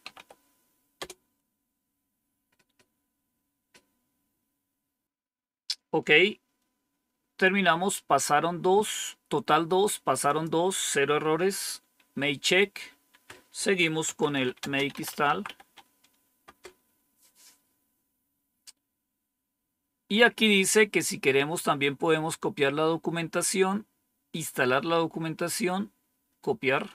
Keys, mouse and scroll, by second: 0.0-0.8 typing, 10.1 click, 11.2 Up, 13.0 Down, 13.7-16.0 typing, 16.3 Return, 21.7-24.5 drag, 25.3-26.3 right drag.